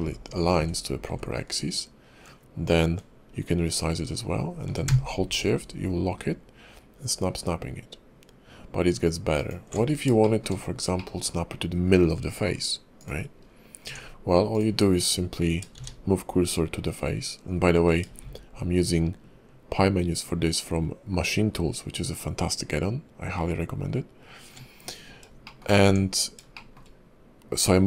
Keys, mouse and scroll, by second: 10.2 shift+middle click, 10.5-10.9 scroll up 2, 10.9 middle click, 13.0 click, 13.4-13.9 scroll down 1, 13.9 Tab, 14.5 click, 15.7 shift+s, 18.2 shift+s, 25.4 shift+middle click, 25.8 Tab, 26.5 shift+middle click.